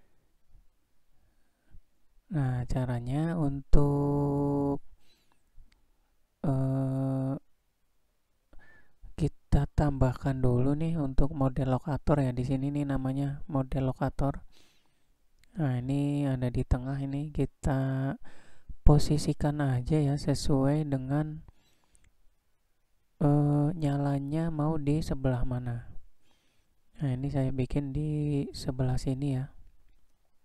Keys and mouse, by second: 2.7-3.2 middle drag, 4.8 middle click, 8.9-13.4 drag, 14.1-14.6 middle drag, 16.4 click, 17.4-18.5 drag, 18.7 middle click, 20.3 click, 20.8 shift+middle click, 22.0-22.5 shift+middle drag, 23.8 g.